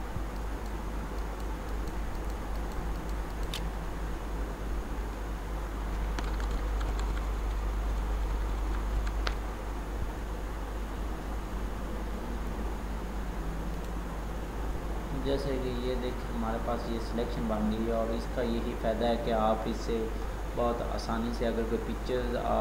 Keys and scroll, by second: 6.2 ctrl++.